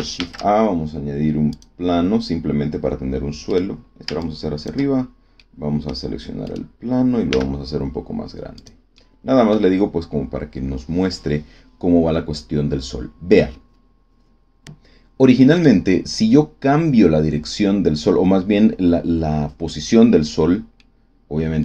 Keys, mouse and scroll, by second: 0.1 shift+a, 1.4 click, 3.4 click, 4.2 ctrl+click, 5.3 middle click, 6.4 right click, 7.2 s, 8.5 click, 8.9 middle click, 9.5-10.9 scroll down 1, 10.9-11.2 scroll down 1, 15.5 right click, 20.7 click, 21.1 middle click.